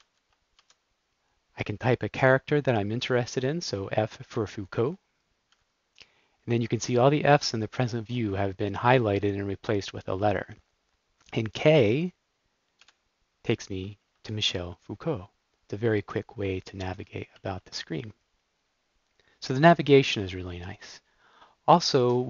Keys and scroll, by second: 0.1 alt+j, 5.4 f, 12.8 k, 14.4 super+d.